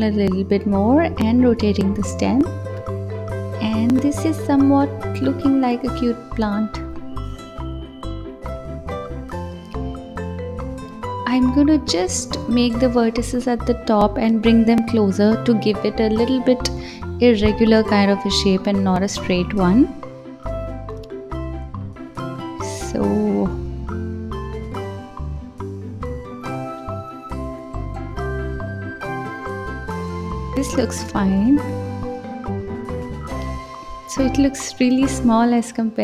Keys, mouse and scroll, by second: 0.8 r, 1.9 click, 2.2 g, 3.3 r, 5.3 click, 5.6-6.2 scroll down 2, 6.2-6.7 scroll up 7, 7.4 click, 8.6-9.9 drag, 11.5 s, 13.1-13.9 drag, 13.9 scroll down 1, 14.5 click, 16.3 alt+z, 17.2 click, 17.7 ctrl+s, 18.2 click, 19.3 s, 20.1 g, 21.3 click, 21.8 ctrl+s, 22.3 click, 23.4-23.9 scroll down 2, 23.9 scroll up 3, 28.5 click, 31.4 click, 32.4 scroll down 2, 34.5-36.0 drag.